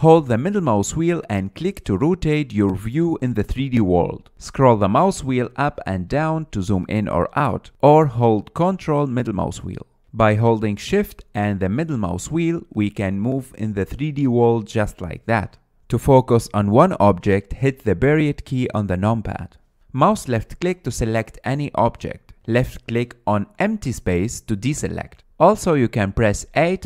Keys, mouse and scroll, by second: 1.3-4.3 middle drag, 5.7-6.5 scroll up 6, 6.5-7.4 scroll down 8, 7.4-8.6 scroll up 2, 8.6-9.0 scroll up 1, 9.0-12.0 ctrl+middle drag, 12.2-17.1 shift+middle drag, 17.1 click, 17.5-18.8 scroll down 3, 18.8 KP_Decimal, 19.7-20.3 scroll down 8, 20.4-21.6 shift+middle drag, 21.6 drag, 22.4 click, 24.6 click.